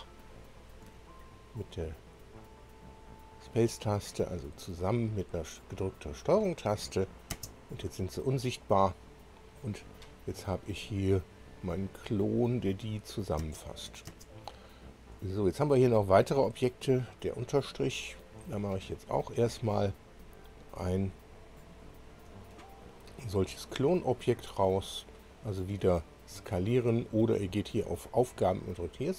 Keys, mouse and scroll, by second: 1.1 ctrl+click, 1.9 ctrl+click, 2.8 ctrl+click, 3.9 ctrl+click, 6.3 ctrl+click, 10.4-11.4 scroll down 2, 11.4-12.0 scroll down 2, 12.9 click, 14.0 space, 17.4 click, 19.1 ctrl+click, 19.7 ctrl+click, 21.8 ctrl+click, 27.7 click.